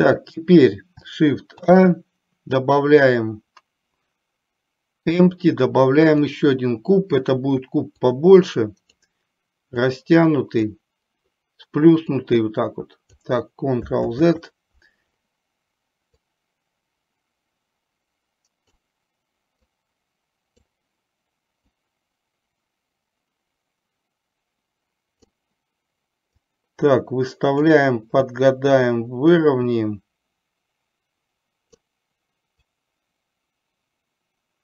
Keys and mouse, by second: 1.7 shift+a, 8.3 click, 9.9 click, 12.4 click, 14.2 ctrl+z, 16.4 click, 16.9-18.9 drag, 19.8-20.8 drag, 22.0-25.4 drag, 26.4-27.9 drag, 29.4 click, 29.7-32.0 drag, 33.0-34.6 drag.